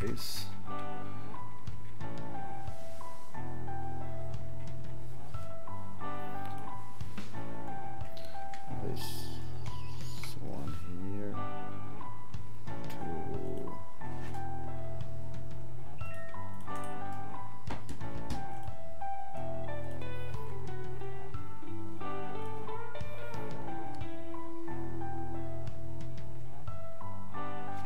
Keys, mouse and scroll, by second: 16.5 click, 19.9 click, 22.4 click.